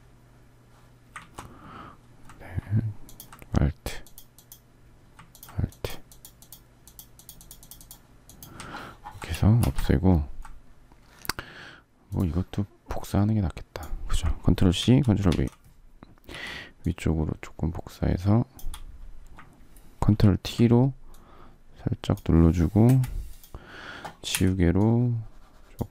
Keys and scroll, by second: 1.7 ctrl+alt+z, 9.1 alt+space, 14.5 ctrl+c, 15.5 ctrl+v, 16.0 v, 19.9 ctrl+t, 22.6 Return, 24.0 e.